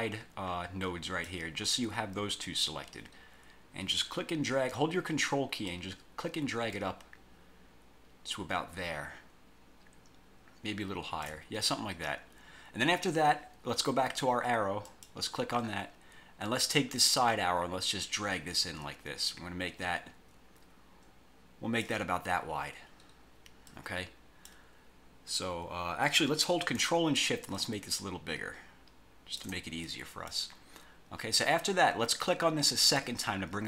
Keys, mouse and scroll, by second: 5.8-11.5 ctrl+drag, 15.0 click, 17.4-22.2 drag, 23.8 click, 27.7-29.7 ctrl+shift+drag, 30.0 ctrl+shift+click, 33.0 click.